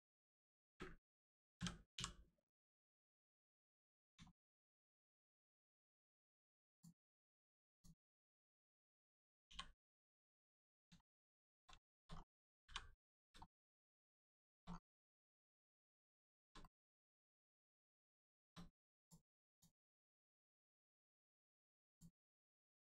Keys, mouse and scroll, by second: 0.6 ctrl+space, 1.6 space, 3.1 click, 3.6 scroll up 1, 4.3 shift+middle click, 6.7 scroll up 1, 7.1 shift+middle click, 7.8 middle click, 9.4 l, 10.3 scroll up 1, 10.4 middle click, 11.0 shift+middle click, 12.1 scroll down 1, 12.6 g, 13.2 click, 13.4 shift+middle click, 13.7 scroll up 1, 14.4 shift+middle click, 14.7 scroll up 1, 15.5 middle click, 15.9-16.2 scroll up 2, 16.2 shift+middle click, 16.6 middle click, 16.7 middle click, 18.3 shift+middle click, 18.5 middle click, 18.6 middle click, 19.0 click, 19.9 shift+middle click, 21.1 middle click, 21.2 middle click, 21.9 click, 22.2 middle click.